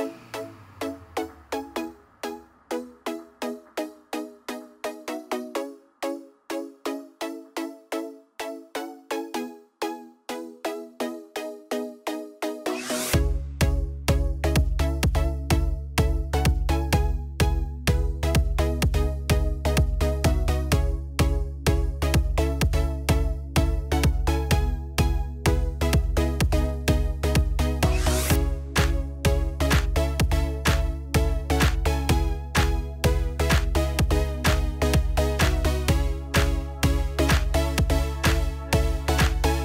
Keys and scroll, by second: 34.4 ctrl+t.